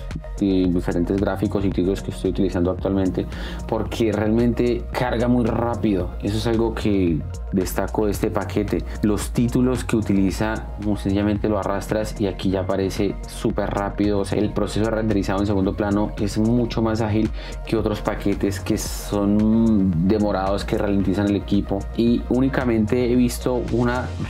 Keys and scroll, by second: 12.0 space.